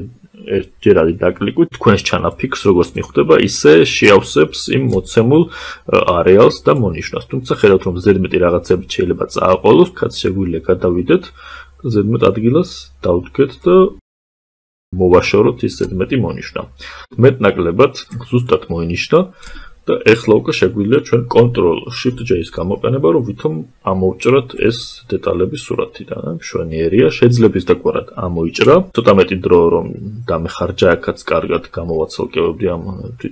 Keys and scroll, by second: 21.5 ctrl+shift+j.